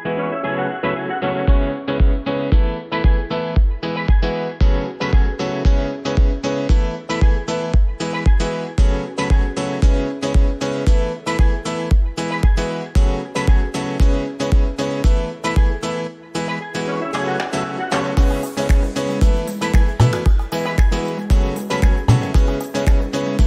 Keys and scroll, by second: 0.5 KP_Add, 3.0 l.